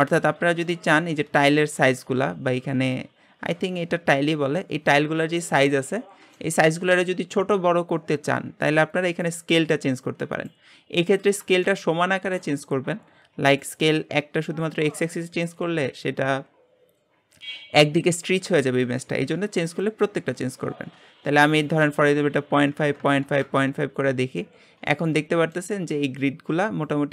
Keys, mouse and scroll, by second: 1.0-1.4 scroll up 2, 1.4-1.9 shift+middle drag, 1.9-5.8 scroll up 1, 5.8-6.3 scroll up 4, 6.3-7.2 shift+middle drag, 7.2-9.3 scroll down 2, 9.3-11.3 drag, 11.3 scroll down 3, 11.6-22.3 shift+middle drag, 24.5 scroll down 2, 24.9-27.1 middle drag.